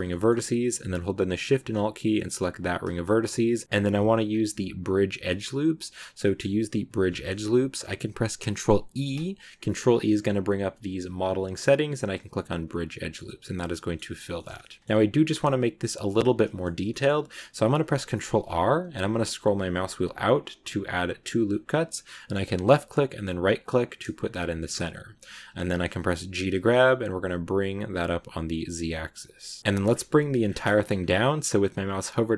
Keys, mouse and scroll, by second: 2.4 alt+shift+right click, 2.9-4.1 middle drag, 4.1 scroll down 1, 6.1 middle click, 6.3 scroll down 1, 6.3 scroll up 1, 6.9 scroll up 2, 8.8 ctrl+e, 12.5 scroll down 4, 12.8-14.0 middle drag, 14.0 scroll down 2, 14.2 shift+middle click, 14.7 scroll up 2, 15.2-15.9 scroll down 1, 16.7-19.2 middle drag, 24.0 middle click, 24.9 g, 29.6 scroll down 4, 30.3 scroll up 4, 30.4 scroll down 1, 30.4-31.1 scroll up 2.